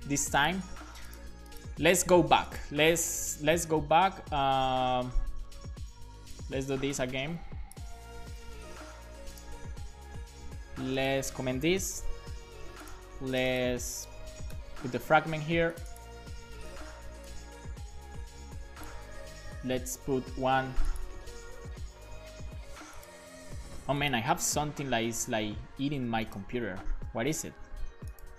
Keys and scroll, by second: 8.4 super+c, 12.0 /, 12.1 /, 12.1 space, 14.6 BackSpace, 16.9 BackSpace, 20.1 super+v, 21.6 Return, 22.1 super+v, 22.7 super+s.